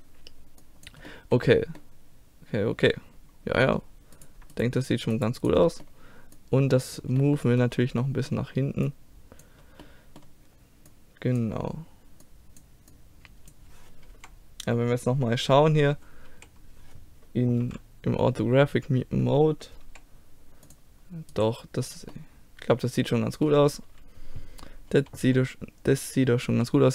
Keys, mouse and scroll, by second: 1.1-2.6 middle drag, 4.1-5.7 drag, 5.7-7.4 middle drag, 6.3-7.5 drag, 6.3-7.3 right drag, 7.5 middle click, 7.6 click, 8.2 middle click, 8.9-10.6 drag, 10.6 middle click, 10.9-13.0 drag, 13.0-14.1 middle drag, 14.1 KP_1, 16.0 middle click, 16.3 z, 17.6 KP_5, 18.7-19.8 middle drag, 19.8 g, 21.3 right click, 21.9 click, 22.4 middle click, 23.2 middle click, 23.4-24.9 middle drag, 26.5 t.